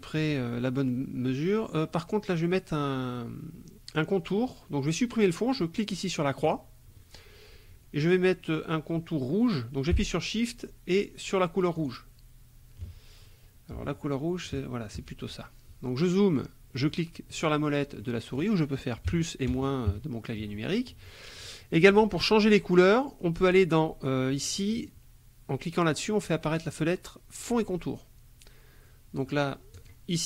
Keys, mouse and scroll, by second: 6.5 click, 11.8 shift+click, 14.5 shift+click, 16.7 click, 17.3 click, 18.0 click, 19.1 KP_Subtract, 19.5 KP_Add, 19.9 KP_Subtract, 26.0 click, 29.8 click.